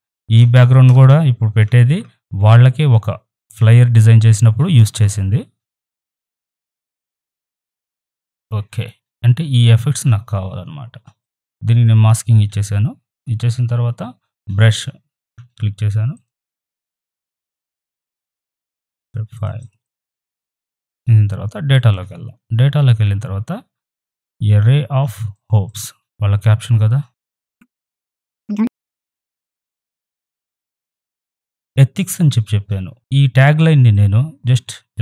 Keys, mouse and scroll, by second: 0.4 ctrl+-, 1.6 ctrl+t, 2.5 click, 3.9-6.4 alt+drag, 6.4 ctrl+=, 7.5 right click, 7.6-10.5 drag, 11.2 click, 15.3 b, 16.1 click, 25.0 right click, 25.3-28.5 drag, 28.5 ctrl+t, 28.6 click, 28.7 ctrl+t, 29.1-31.6 alt+drag, 33.9-35.0 drag.